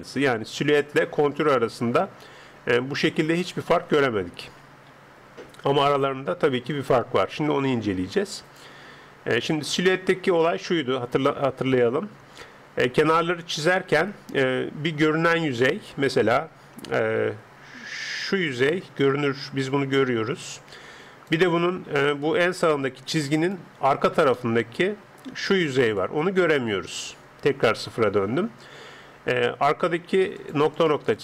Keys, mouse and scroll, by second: 10.4-13.9 middle drag, 16.4-17.6 middle drag, 17.6 d, 18.1 d, 18.2-21.5 d, 18.3 click, 21.8-24.3 d, 22.3 click, 24.3 middle click, 25.9-28.6 drag, 25.9-27.2 d, 27.7 KP_0, 30.1 d, 30.3-31.2 drag, 30.6 d, 30.7-31.2 d.